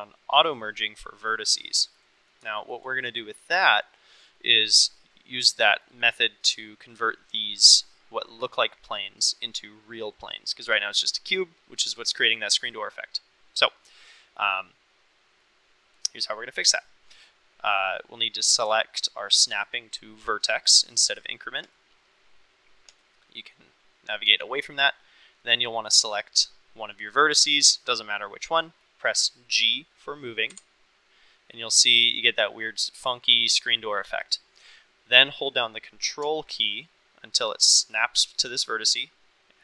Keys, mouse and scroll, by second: 2.5 shift+middle click, 3.0 middle click, 5.8 middle click, 8.5 middle click, 11.3-15.4 middle drag, 18.4-22.3 drag, 22.9 click, 24.4 middle click, 27.0 click, 30.5 g.